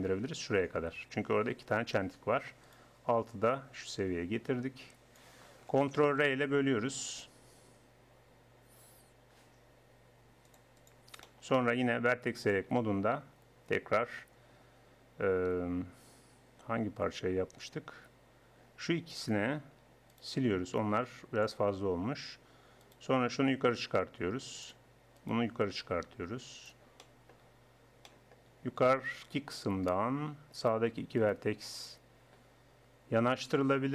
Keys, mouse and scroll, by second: 0.1 click, 2.7 click, 3.3-4.4 middle drag, 4.4 click, 6.1 ctrl+r, 11.3-12.4 middle drag, 12.4-14.2 drag, 14.2 middle click, 15.9-17.8 middle drag, 19.2-21.0 right drag, 21.0 x, 21.9-28.1 drag, 23.5-24.6 middle drag, 25.2-26.7 middle drag, 26.7 right click, 28.1-30.7 middle drag, 30.7-33.1 right drag, 33.5-33.9 drag.